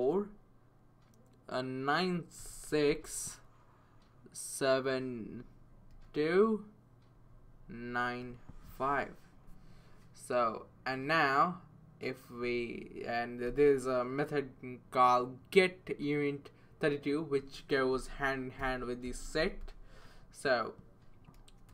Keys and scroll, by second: 2.4-2.9 typing, 5.9 7, 7.1 typing, 8.2-8.7 typing, 17.9-20.1 typing.